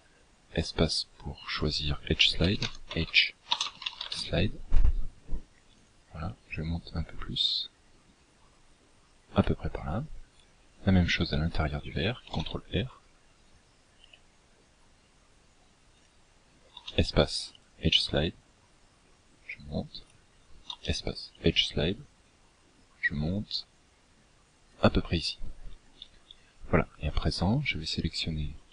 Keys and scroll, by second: 11.7 ctrl+r, 16.2 space, 20.1 space.